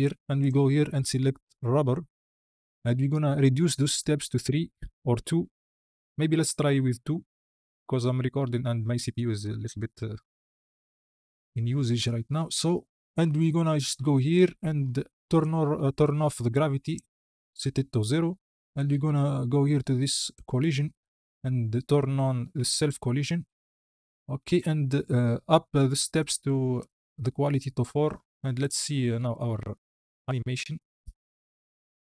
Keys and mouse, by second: 0.4-2.5 drag, 3.0-7.1 drag, 14.1 click, 15.2-16.8 drag, 22.6 click, 26.6 click, 28.0-28.4 middle drag, 28.4 click, 29.3 space.